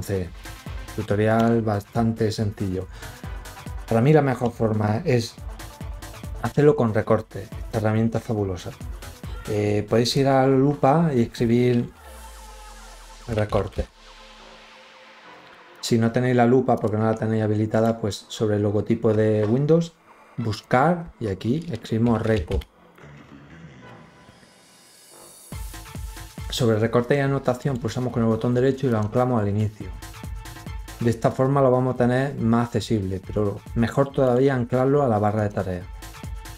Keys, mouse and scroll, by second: 0.2 click, 1.2 click, 9.8 click, 12.7-14.1 typing, 15.6 click, 16.6 click, 17.5 right click, 20.3 click, 21.6-22.7 typing, 27.4 right click, 28.7 click, 34.1 right click, 35.2 click.